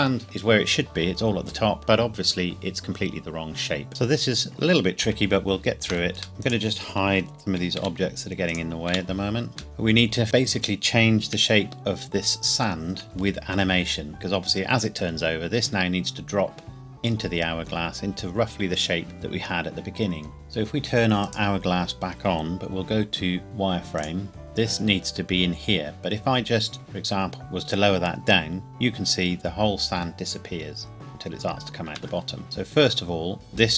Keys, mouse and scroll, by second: 3.9 click, 5.6 shift+middle click, 6.4 click, 7.8 h, 8.5 click, 8.9 h, 9.4 scroll up 1, 9.6 click, 11.4 KP_1, 12.1 KP_1, 13.0-14.1 scroll up 1, 16.8-17.2 scroll down 1, 21.2 click, 23.4 z, 24.0 click, 26.7 g, 31.8 Escape, 32.4 click.